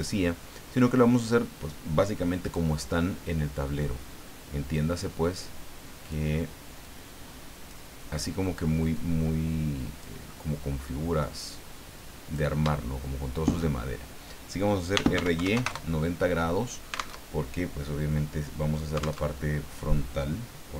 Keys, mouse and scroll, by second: 2.4 click, 3.6 scroll down 2, 4.7-6.3 drag, 6.8 click, 8.9-10.2 drag, 10.3 middle click, 11.5 click, 12.8 shift+middle click, 14.7-15.6 typing, 15.7 KP_Enter, 17.2 alt+Tab, 19.3 alt+Tab.